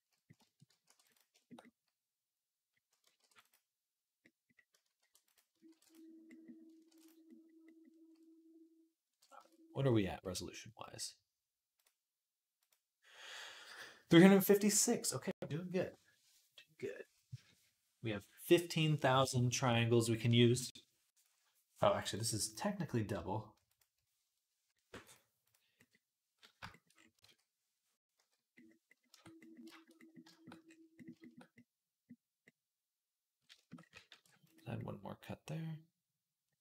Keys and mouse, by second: 0.7 ctrl+r, 2.2 click, 2.4 middle click, 3.0 ctrl+r, 3.0-8.3 ctrl+drag, 4.8 ctrl+r, 5.5 ctrl+r, 6.6 ctrl+r, 8.3-11.6 middle drag, 9.2 Tab, 10.1 /, 11.6-21.9 drag, 21.9 middle click, 22.2-28.8 drag, 24.9-28.8 middle drag, 24.9-28.8 right drag, 27.5 ctrl+s, 28.0 /, 28.9 Tab, 33.9 ctrl+r, 34.3-36.0 middle drag.